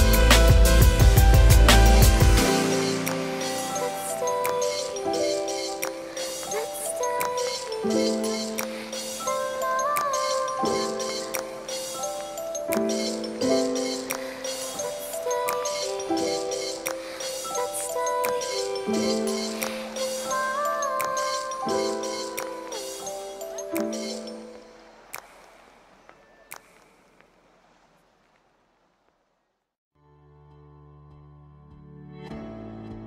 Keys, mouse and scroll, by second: 0.1 Tab, 0.6 click, 0.7 right click, 0.7 n, 5.4-5.9 right drag, 6.0 Tab, 6.7 shift+s, 7.8 Tab, 8.0 ctrl+alt+shift+c, 8.9 click, 9.2 s, 10.5-11.2 drag, 11.4-15.9 drag, 16.1 click, 17.6 click, 18.3-20.3 drag, 20.7 click, 21.6 KP_7, 22.4 middle click, 22.8 KP_Decimal, 23.8-27.1 drag, 27.3-28.3 drag, 29.4 KP_7, 30.9-32.6 right drag, 32.1-32.6 drag.